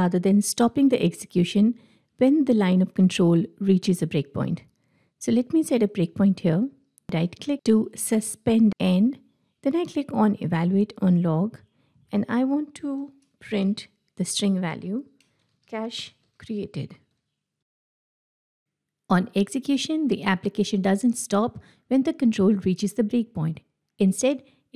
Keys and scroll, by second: 6.5 ctrl+F8.